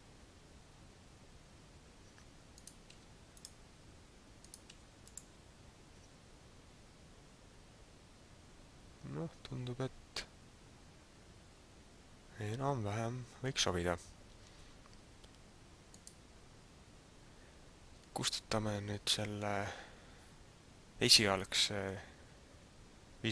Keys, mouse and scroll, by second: 1.7 scroll down 1, 2.1 Tab, 2.5 right click, 2.9 v, 4.3 right click, 4.7 v, 5.9 Tab, 16.0 right click, 18.1-19.0 scroll down 3.